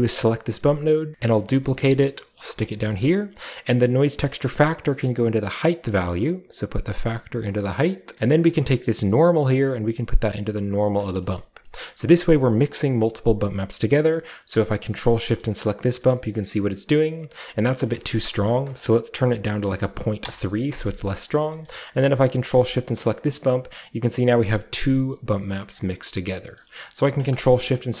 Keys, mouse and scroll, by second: 0.0 click, 1.1 z, 1.3 ctrl+click, 1.5 shift+d, 2.5-5.7 drag, 2.9-3.7 scroll up 1, 3.7-4.4 scroll up 1, 4.4-5.6 scroll up 1, 5.6 scroll up 1, 6.2 click, 6.5-7.4 drag, 8.5-15.9 drag, 8.7-11.0 middle drag, 11.2 scroll up 1, 11.5 middle click, 11.5-12.8 scroll down 1, 11.8-12.8 middle drag, 14.7-15.9 scroll up 1, 15.9-16.5 scroll up 1, 17.8-19.6 drag, 19.6 ., 19.8 3, 20.2 Return, 22.5-24.4 ctrl+shift+drag, 22.5 ctrl+shift+middle click, 23.3-24.4 shift+scroll up 1, 24.4 middle click, 24.4-25.3 scroll down 1, 25.3 scroll down 1, 25.7 middle click, 26.2 scroll down 1, 26.6-28.0 middle drag, 27.3 ctrl+shift+click, 27.3-28.0 ctrl+shift+scroll down 1, 27.3 typing.